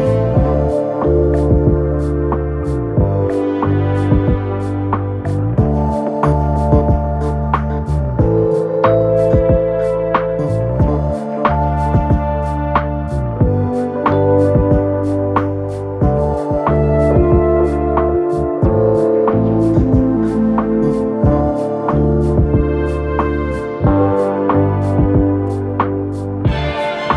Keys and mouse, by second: 6.9-8.8 middle drag, 7.5 shift+d, 8.1 s, 8.8-10.1 drag, 9.4 s, 10.1-11.5 middle drag, 11.5-16.4 drag, 14.8 s, 15.8 s, 16.4 middle click, 17.4-19.2 drag, 18.2 s, 19.2-27.1 middle drag, 20.6-22.5 drag, 21.9 s, 22.9-27.1 drag.